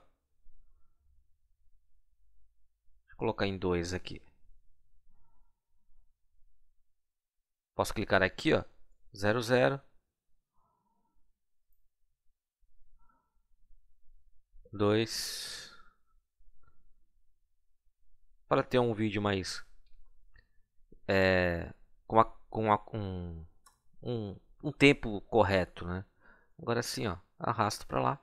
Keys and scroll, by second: 7.0 Right, 8.6 BackSpace, 9.5 0, 14.3 2, 15.5 Delete, 16.9 Right, 18.6 BackSpace, 19.9 0, 23.5 Return.